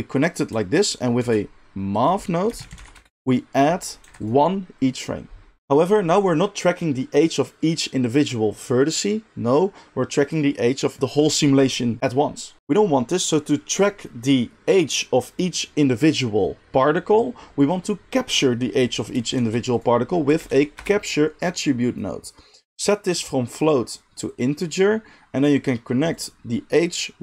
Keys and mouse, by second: 1.2 shift+a, 3.9 click, 5.6 click, 19.4 shift+a, 23.6-27.2 drag.